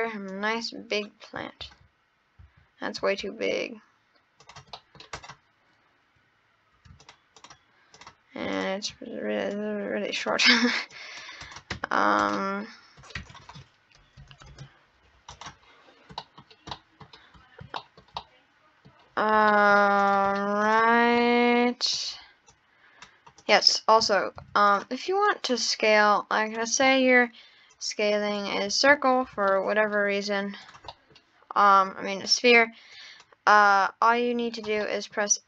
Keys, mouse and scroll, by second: 0.3 click, 1.7 ctrl+z, 2.4 ctrl+z, 3.2 s, 4.7 middle click, 5.1 click, 7.0 shift+click, 7.4 shift+click, 8.0 shift+click, 8.6 shift+click, 9.6 click, 10.9 click, 11.5 click, 11.8 Tab, 11.9 scroll down 1, 12.2 click, 13.0 scroll up 2, 13.2 Tab, 14.2 Right, 14.5 KP_0, 15.3 click, 15.6-16.1 scroll up 8, 16.2 middle drag, 16.4 scroll down 8, 16.7-17.0 middle drag, 17.2 scroll up 12, 17.8-20.0 shift+middle drag, 20.0 click, 20.4 scroll down 1, 20.6 click, 21.2-22.5 middle drag, 22.5 click, 23.4 click, 24.4 shift+d, 25.3 click, 26.5 click, 26.9 middle click, 27.7 click, 29.5-30.0 middle drag, 30.0-30.6 scroll down 1, 30.6 click, 30.8 scroll up 1, 30.9 middle click, 31.8 click, 32.9 click, 33.6 click, 34.8-35.4 middle drag.